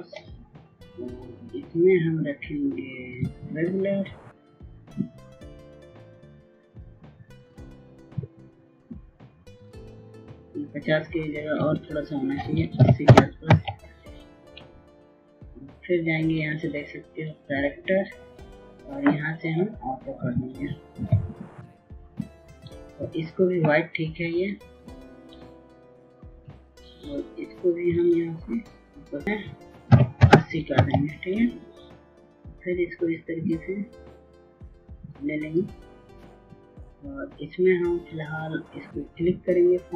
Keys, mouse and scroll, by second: 0.7 Tab, 2.6 click, 14.0 KP_8, 14.3 KP_0, 14.8 Tab, 17.0 click, 28.1-30.5 drag, 32.0 KP_8, 32.4 KP_0, 32.9 Tab, 34.6-39.9 drag.